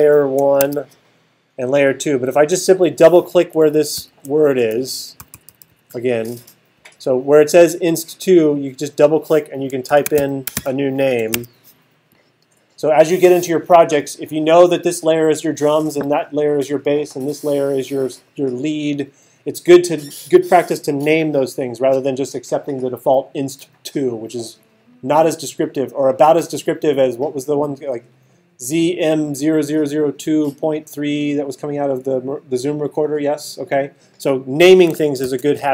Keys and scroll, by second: 0.0-0.6 typing, 4.0 alt+super+8, 5.2 alt+super+=, 9.6-11.3 typing, 35.2 alt+super+8.